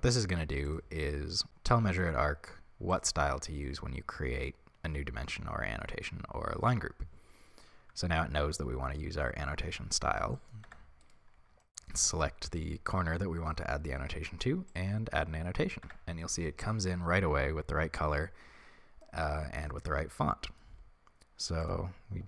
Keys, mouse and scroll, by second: 0.8-10.4 drag, 10.4 middle click, 10.6 Tab, 11.0 right click, 11.6-14.8 shift+middle drag, 14.8 click, 15.8 Tab, 19.0-22.2 middle drag.